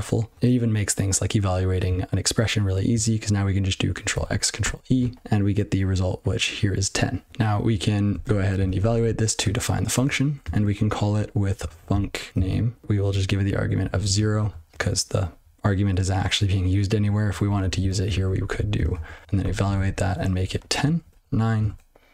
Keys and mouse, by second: 8.1 ctrl+e, 8.7 ctrl+e, 10.0 Return, 10.4-13.8 typing, 14.2 ctrl+e, 16.9 click, 17.5 ctrl+b, 17.6 ctrl+n, 17.7 ctrl+n, 17.8 ctrl+b, 18.0 ctrl+b, 18.1 ctrl+p, 18.4 ctrl+b, 18.8 ctrl+alt+space, 19.0 ctrl+w, 19.2 ctrl+e, 19.6 ctrl+n, 19.7 ctrl+b, 20.1-21.1 typing, 21.6 ctrl+e.